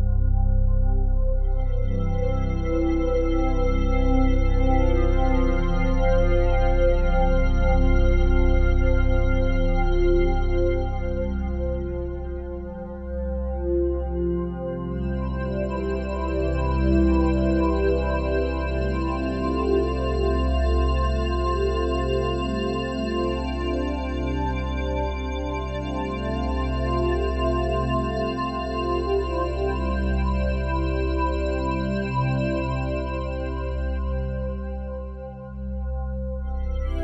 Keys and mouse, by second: 1.5-6.0 drag, 6.0-6.4 typing, 8.7 Escape, 9.3-11.9 alt+drag, 12.3 ctrl+alt+click, 12.7-15.1 alt+drag, 13.8 typing, 15.9-21.9 drag, 22.0 ctrl+alt+click, 24.0-35.1 alt+drag, 35.4-37.0 ctrl+alt+drag.